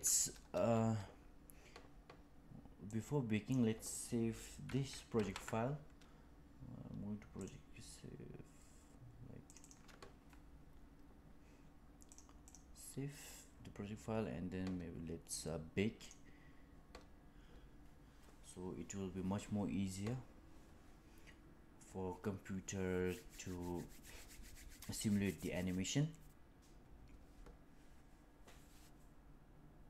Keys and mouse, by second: 2.8 click, 5.1 ctrl+s.